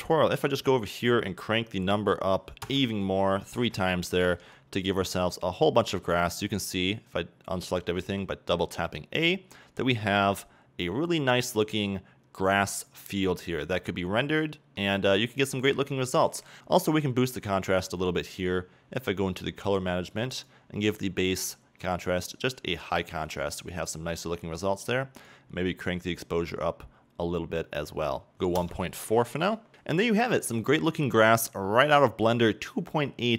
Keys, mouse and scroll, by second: 3.4-8.7 drag, 3.8 KP_Enter, 4.8 a, 9.3-10.7 drag, 10.7-13.2 shift+middle drag, 13.2-14.6 scroll up 2, 14.6-16.6 middle drag, 23.0-29.7 drag.